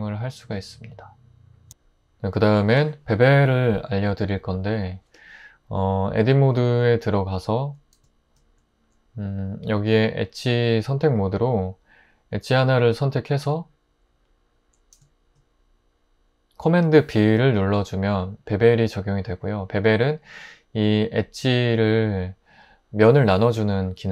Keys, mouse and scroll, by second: 5.8 Tab.